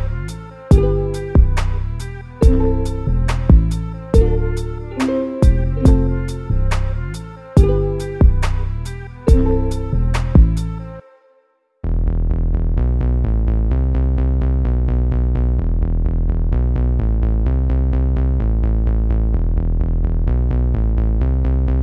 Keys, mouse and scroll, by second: 0.5-0.9 scroll up 1, 0.9 click, 2.1 3, 2.4 click, 2.6 click, 3.2 click, 3.3 click, 4.2 a, 4.3 a, 4.6 click, 5.8 KP_7, 6.5 g, 9.2 click, 11.1 a, 11.5-14.2 middle drag, 14.2 2, 14.3 click, 14.5 click, 15.1 ctrl+x, 16.3 click, 17.0 KP_1, 18.0 KP_Add, 18.2 KP_Add, 18.4 KP_Add, 19.8-20.2 scroll down 5, 20.2 middle click, 20.9-21.3 scroll up 1, 21.3 shift+middle click.